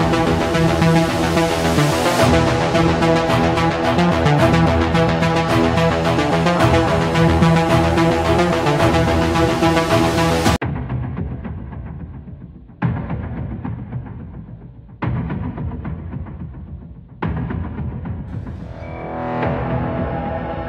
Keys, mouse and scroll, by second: 1.7 click, 2.7 click, 4.6 click, 5.5 click, 7.0 click, 8.2 click, 9.4 click, 10.3 scroll, 14.2 click, 17.1 click, 18.3 click, 19.9 click.